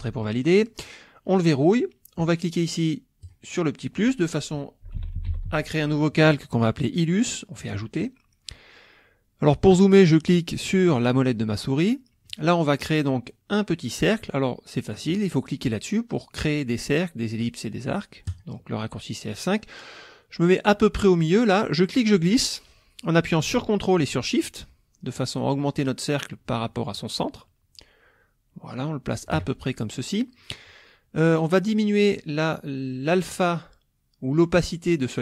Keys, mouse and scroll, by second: 1.3 click, 3.2 click, 4.6-6.0 typing, 7.6 click, 10.3 middle click, 10.3-12.4 scroll up 6, 10.8 middle click, 11.4 middle click, 11.9 middle click, 12.4 click, 18.3 click, 21.2-29.6 drag.